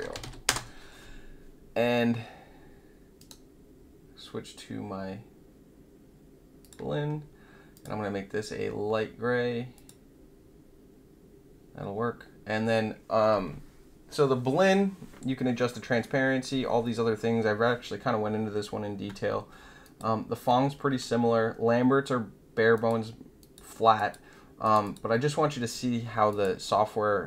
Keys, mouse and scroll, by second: 0.0-0.7 typing, 3.2 right click, 6.6 click, 7.7 click, 9.7 click, 19.8 click, 22.7 click, 23.3 click, 23.9 click, 24.6 click, 24.8 click, 26.2 click.